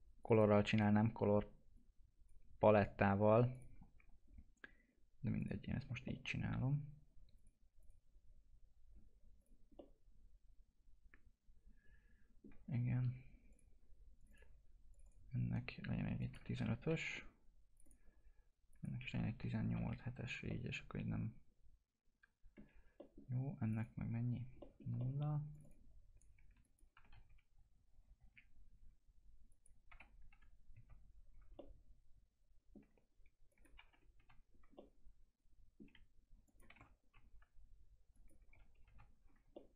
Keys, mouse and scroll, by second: 0.7 right click, 1.7-5.9 drag, 6.0-7.3 alt+middle drag, 7.3 click, 9.7-13.5 alt+middle drag, 13.5-16.5 drag, 16.5 1, 17.7 click, 19.1 1, 20.4-22.9 alt+middle drag, 22.9 middle click, 23.6 click, 24.6 middle click, 25.5 click, 26.9 3, 29.5 click, 29.9 2, 31.5-33.5 alt+middle drag, 33.5 click, 33.7 3, 34.7-36.4 alt+middle drag, 36.4 click, 36.7 1, 38.1 click, 38.4 1, 39.5-39.7 alt+middle drag.